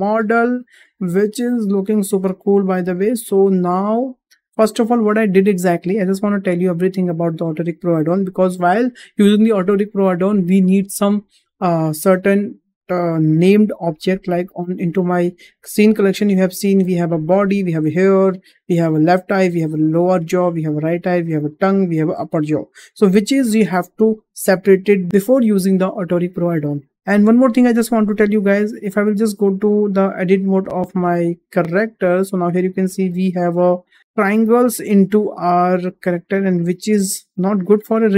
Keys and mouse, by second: 0.3 shift+middle click, 1.0-2.6 middle drag, 2.9 `, 3.9 shift+middle drag, 4.5 middle drag, 17.5 click, 18.9 click, 20.6 click, 22.0 click, 23.0 click, 30.6 click, 30.9 Tab, 32.1 shift+middle drag, 32.8-33.5 middle drag, 34.0-35.0 middle drag, 35.2 shift+middle click, 35.9-37.1 middle drag, 37.4-38.1 middle drag.